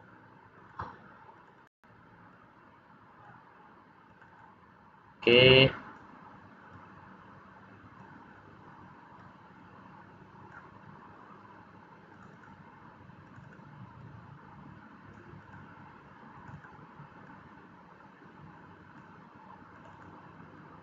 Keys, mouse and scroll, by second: 0.5 click, 1.3 click, 1.6 click, 2.2 click, 4.0 click, 4.3 click, 5.2 click, 6.6 click, 9.1 click, 12.0 click, 12.3 click, 13.2 click, 13.4 click, 13.9 click, 15.3 click, 16.3 click, 16.5 click, 17.2 click, 19.6 click, 19.9 click, 20.5 click.